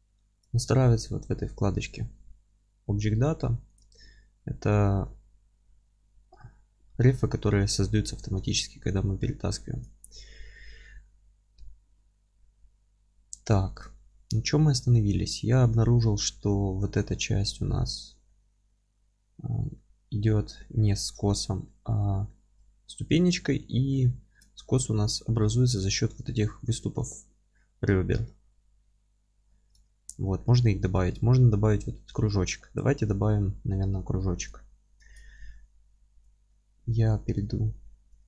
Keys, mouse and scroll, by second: 5.1-9.8 middle drag, 5.5 scroll up 2, 6.9-8.3 scroll up 2, 8.3 ctrl+space, 9.8 click, 10.4-11.7 scroll down 2, 11.7-34.5 alt+middle drag, 14.2-14.5 scroll up 2, 17.9-18.3 scroll up 1, 19.5 scroll down 1, 23.6-24.0 scroll up 1, 24.5-25.0 scroll down 1, 25.6 scroll up 1, 32.5-32.9 scroll down 2, 32.9-33.3 scroll up 2, 34.5 click, 34.7-38.2 middle drag, 35.1 alt+z.